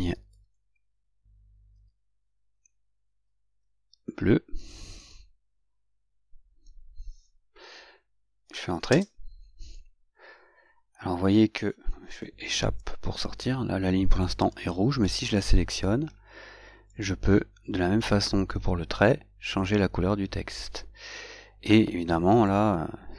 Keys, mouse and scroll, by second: 5.2 u, 9.1 Return, 12.9 Escape, 14.5 click, 18.5 click, 19.8 click, 22.7 click.